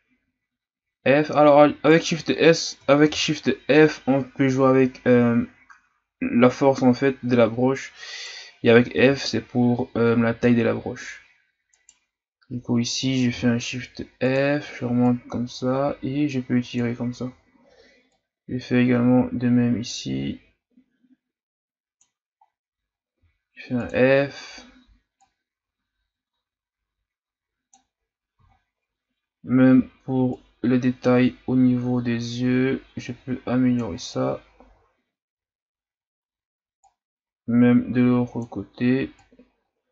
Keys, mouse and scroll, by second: 3.0 shift+f, 9.0 f, 13.3 shift+f, 15.1-22.0 drag, 22.4 scroll up 1, 23.1 f, 25.2-28.0 drag, 28.0-28.9 scroll down 2, 28.9-30.2 scroll up 1, 30.3-33.3 drag, 34.0-34.6 scroll down 3, 34.6-35.6 scroll up 4, 36.8-39.9 drag.